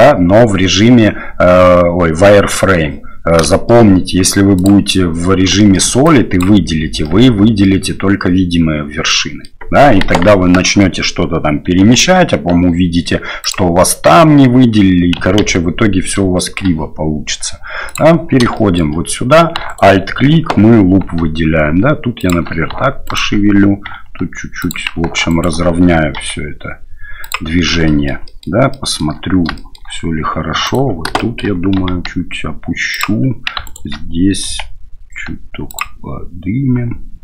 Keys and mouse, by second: 3.5 shift+click, 4.6-5.5 drag, 5.6 shift+click, 7.0 click, 9.0 middle click, 10.0 KP_1, 10.3 KP_3, 11.8 g, 15.4 ctrl+z, 16.4 shift+click, 17.9 click, 18.5 shift+click, 19.7 alt+right click, 21.0 g, 23.0 alt+right click, 23.9 g, 25.3 alt+right click, 26.2 g, 27.8 shift+middle click, 28.2 shift+middle click, 28.7 shift+middle click, 29.6 shift+middle click, 30.6 alt+right click, 31.2 shift+middle click, 31.8 g, 33.6 alt+right click, 34.5 g, 36.8 g.